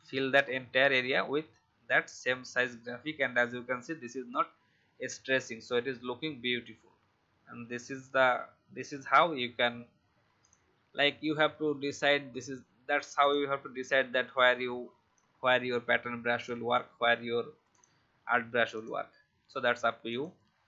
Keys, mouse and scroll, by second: 0.5 alt+scroll up 1, 1.6-3.1 alt+scroll down 1, 3.3 alt+scroll up 1, 9.6-10.3 alt+scroll down 1, 10.3 click, 15.1-20.6 alt+shift+drag.